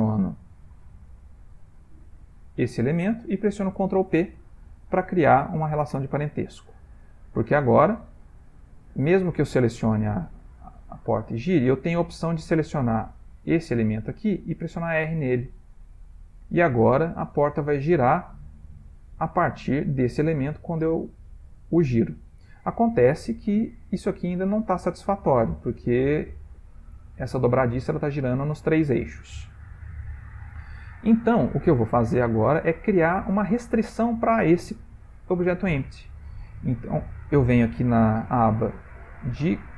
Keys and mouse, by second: 0.6 shift+click, 4.1 ctrl+p, 7.5 click, 8.6 click, 9.1 r, 14.6 r, 19.8 r, 23.9 shift+middle click, 24.4 middle click, 27.7 middle click, 28.1 middle click, 28.5 r, 31.4 shift+middle click, 31.5-32.4 shift+middle click, 32.0 shift+middle click, 32.4 ctrl+middle click, 34.0 click, 38.7 click.